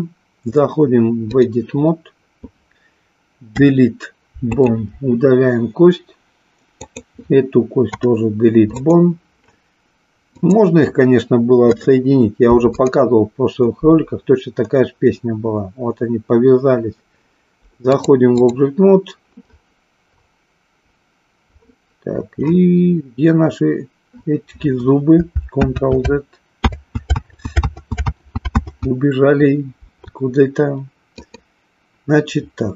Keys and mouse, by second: 3.6 Delete, 6.7 click, 7.9 Delete, 10.3 click, 11.7 Delete, 17.8 click, 25.7 ctrl+z, 26.5 ctrl+z, 27.7 ctrl+z, 28.5 ctrl+z, 31.2 click.